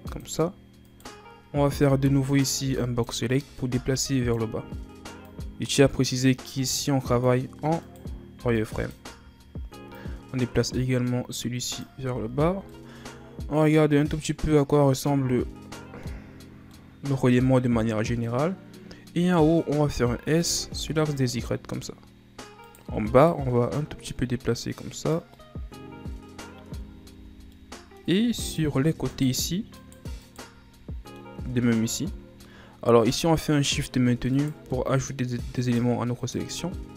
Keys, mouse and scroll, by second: 0.8 right click, 1.8 b, 2.6 b, 3.7 b, 5.2-7.8 drag, 7.8 right click, 8.3 b, 9.9-12.1 drag, 12.1 z, 12.5 scroll down 1, 12.7-15.7 middle drag, 16.7-19.8 middle drag, 20.1 s, 22.4 scroll up 1, 22.6 right click, 23.1 shift+right click, 24.0-25.3 drag, 25.3-26.6 middle drag, 26.6 Tab, 27.1 Tab, 27.5 middle click, 28.4 right click, 29.0 shift+right click, 29.7 shift+right click, 30.2 shift+right click, 30.7-31.7 middle drag, 31.7 shift+right click, 32.4 middle click, 33.3-34.3 ctrl+scroll down 2, 34.3 shift+right click, 34.7 middle click, 35.6 shift+right click, 36.2 shift+right click, 36.8-36.9 middle drag.